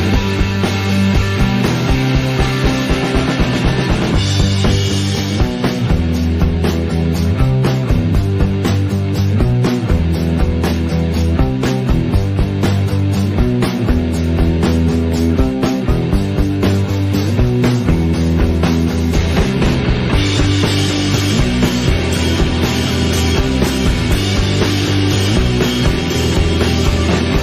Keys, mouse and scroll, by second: 2.8 scroll up 1, 3.1 shift+middle drag, 3.4-3.7 scroll up 1, 3.7 Tab, 3.9 middle click, 4.3 KP_Decimal, 5.1 click, 5.3 z, 5.8 middle click, 6.1 alt+a, 6.4 click, 6.7 KP_1, 7.0-7.3 scroll down 7, 7.3 shift+middle click, 7.7 g, 8.3 o, 8.7 g, 11.9 alt+a, 12.1 alt+click, 12.8 g, 15.8 alt+click, 16.0 s, 18.7 alt+a, 18.8 click, 19.0 middle click, 19.2 g, 20.4 click, 20.5 g, 21.2 click, 21.5 middle click, 22.0 click, 22.1 g, 23.0 click, 23.8 click, 23.9 g, 24.4 click, 25.2 click, 25.2 g, 25.8 g, 26.9 click, 27.0 g.